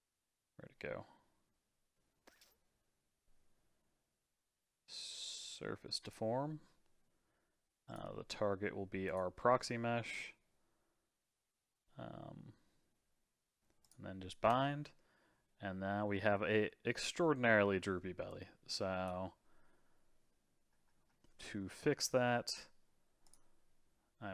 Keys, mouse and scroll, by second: 7.9 click, 13.8 click, 14.5 space, 17.8 space, 18.3-21.3 drag, 23.2 click.